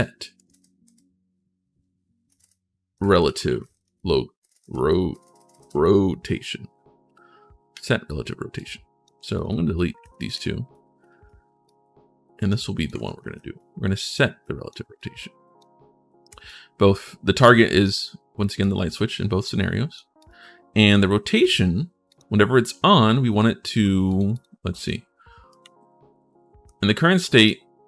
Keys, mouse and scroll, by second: 0.0-0.2 typing, 2.5-5.4 typing, 7.5 click, 8.3 click, 9.1 click, 9.9 click, 10.5 click, 11.5 click, 12.5 click, 13.3 click, 14.2 click, 14.7 click, 16.2-17.6 drag, 18.4-19.7 drag, 20.0 click, 21.2 click, 21.9 click, 23.9 click, 24.1 click, 24.5 click, 25.3-27.2 right drag, 25.4 w, 26.4 d, 27.8 click, 27.8 right click.